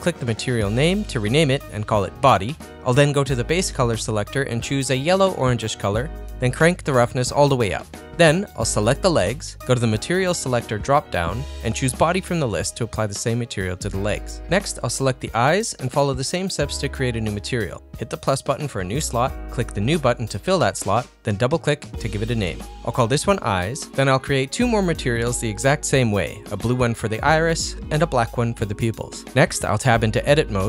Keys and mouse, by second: 4.7 click, 7.8 click, 9.0 click, 9.5 middle click, 11.0-12.0 drag, 12.3 click, 13.1-14.2 middle drag, 14.3 click, 14.7 middle click, 16.7-18.2 drag, 19.5 click, 20.5-21.8 drag, 23.3 click, 23.6-25.1 drag, 28.1 click, 28.3-29.4 drag.